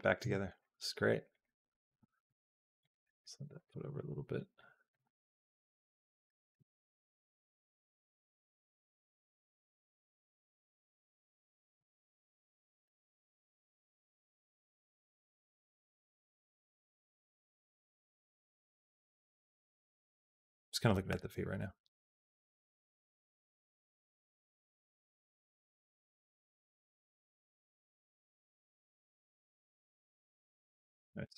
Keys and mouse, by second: 1.1 click, 1.9 g, 2.9 middle click, 3.7 middle click, 4.5 middle click, 5.0 r, 6.1 middle click, 6.5 g, 7.8 middle click, 8.6-9.7 drag, 10.2 shift+middle click, 10.7 middle click, 11.7 shift+middle click, 12.0 middle click, 13.2 click, 13.7 g, 15.5 g, 17.6-30.7 drag, 30.8 middle click.